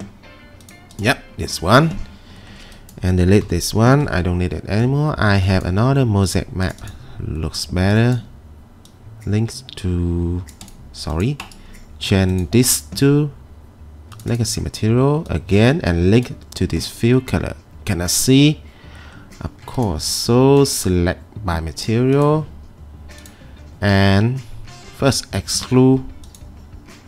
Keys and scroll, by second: 3.5 Delete.